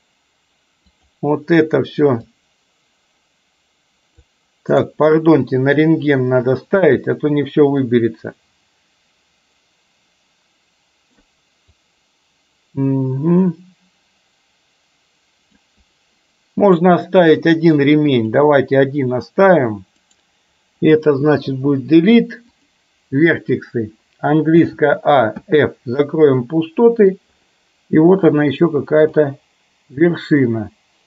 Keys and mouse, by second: 6.8 c, 21.5 Delete, 24.8 a, 25.4 f, 26.5 middle click, 29.2 click.